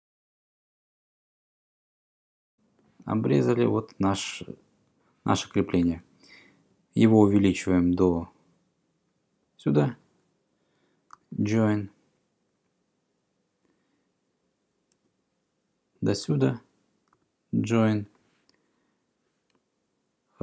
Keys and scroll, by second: 0.9 Tab, 1.1-1.8 typing, 1.9 Return, 7.6 e, 11.4 Return, 15.0 e, 17.2 Return.